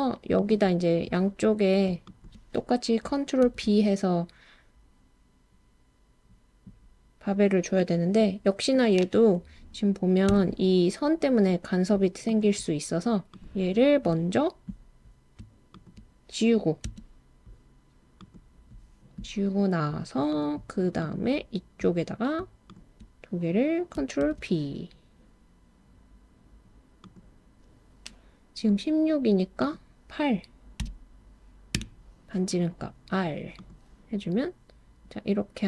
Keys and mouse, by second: 2.0 shift+click, 3.4 super+b, 10.3 Escape, 15.8 shift+click, 16.9 x, 20.3 click, 21.0 click, 24.2 super+b, 27.0 click, 29.7-31.8 drag, 33.6 click.